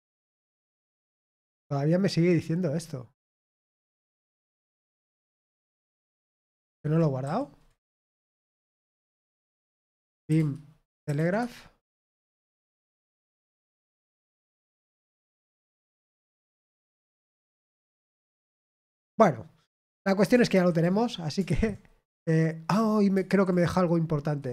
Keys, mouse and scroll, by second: 3.7-5.7 drag, 8.3 ctrl+p, 9.6 ctrl+c, 9.7-18.6 typing, 11.9 Return.